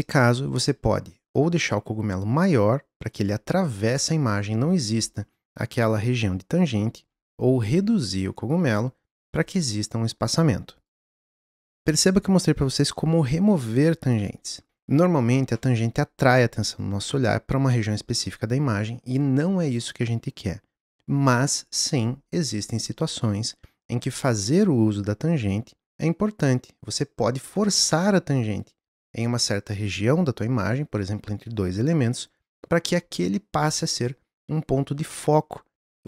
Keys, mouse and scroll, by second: 0.9 s, 10.7 click.